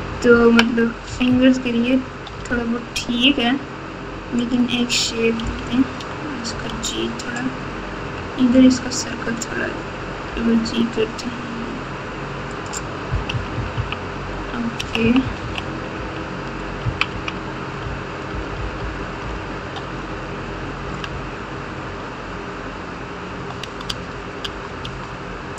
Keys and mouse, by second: 0.0-1.3 typing, 2.3 KP_8, 2.4 KP_8, 4.3 click, 5.4 o, 6.4 g, 13.3 KP_2, 13.5 KP_2, 13.7 KP_2, 14.7-19.7 typing, 23.8 Tab, 24.4 Tab, 24.8 Tab.